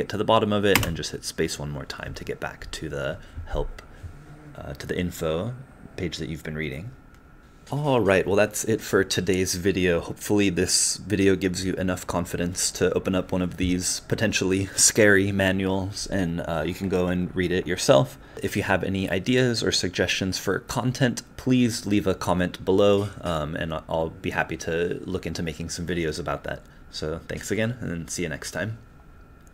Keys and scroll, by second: 0.7 space.